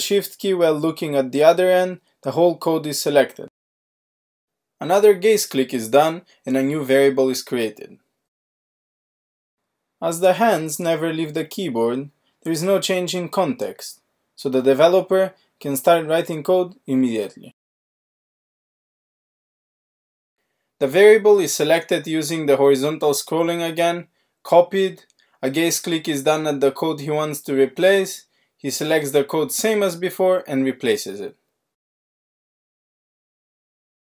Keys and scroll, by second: 3.1 alt+q, 21.2 alt+q, 21.9 alt+s, 23.4 alt+shift+r, 30.6 alt+q, 31.8 alt+shift+r.